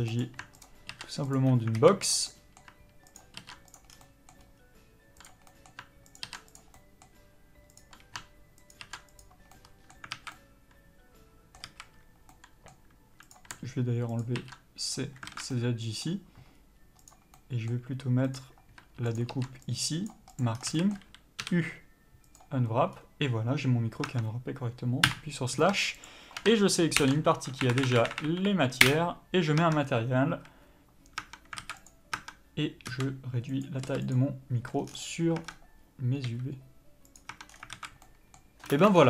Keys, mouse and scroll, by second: 0.0 click, 0.6 ctrl+click, 1.3 ctrl+e, 1.7 alt+a, 2.0 click, 2.2 middle click, 3.1 ctrl+click, 3.7 ctrl+e, 3.9 scroll down 1, 4.0 middle click, 4.4-5.1 scroll up 1, 5.1 click, 5.5 middle click, 6.1 ctrl+click, 6.2 ctrl+e, 6.7 middle click, 7.7 click, 8.7 ctrl+click, 9.2 ctrl+e, 9.5 middle click, 10.1 alt+a, 10.3 middle click, 11.6 a, 12.3 middle click, 13.2 click, 14.1 ctrl+click, 14.9 ctrl+e, 15.3 alt+a, 15.5 middle click, 16.5-17.0 scroll up 1, 17.0 click, 17.4 middle click, 18.2 click, 19.1 ctrl+click, 20.4 ctrl+e, 20.5 scroll down 1, 20.6 a, 20.7 middle click, 22.3 u, 23.9 scroll down 1, 24.0 Tab, 25.0 KP_Divide, 26.0 shift+click, 28.8 Up, 28.9 Return, 29.6 Tab, 30.3 a, 31.2 Tab, 31.6 alt+a, 31.8 click, 32.1 Tab, 33.0 s, 34.6 Tab, 34.7 scroll down 1, 35.4 Tab, 35.5 scroll up 1, 36.2 s, 37.3 Tab, 37.4 scroll down 1, 37.7 alt+a, 38.0 middle click, 38.7 ctrl+space, 38.7-39.0 middle drag, 38.9 scroll down 1.